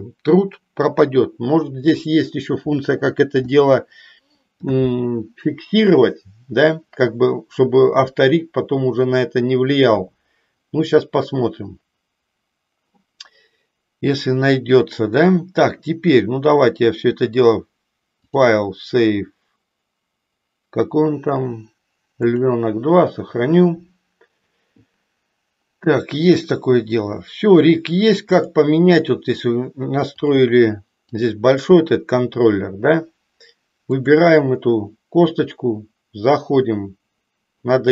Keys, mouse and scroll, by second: 18.2-22.4 drag, 30.2-31.3 drag, 33.8-34.4 drag.